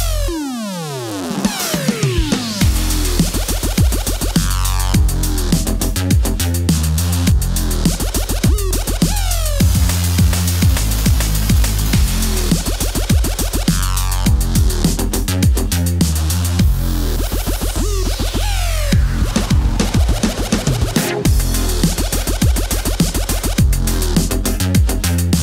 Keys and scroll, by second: 0.0-0.2 typing, 3.2 l, 3.4 Return, 13.6 super+z.